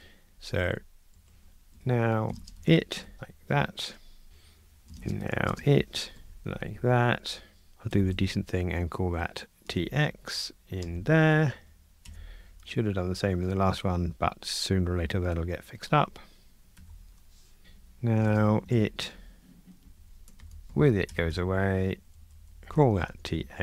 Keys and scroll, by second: 1.1 alt+shift+Left, 3.0 Escape, 4.3 super+F9, 6.4 Delete, 7.9 shift+F6, 16.8 super+F9, 19.1 Escape, 19.9 alt+shift+Right, 22.6 Delete, 22.6 shift+F6.